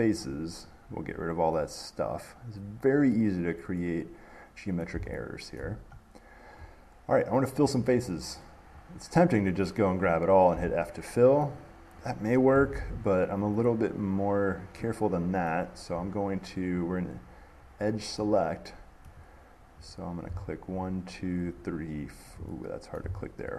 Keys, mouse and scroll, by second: 0.5 click, 1.8 click, 3.3-5.8 middle drag, 6.6 middle click, 9.7 click, 12.6 middle click, 12.9 ctrl+z, 15.7 middle click, 17.1 click, 17.7 scroll, 17.9 middle click, 17.9 middle click, 19.3 middle click, 20.1 click, 21.0 shift+click, 21.3-21.8 scroll, 21.8 click, 23.2-23.5 scroll.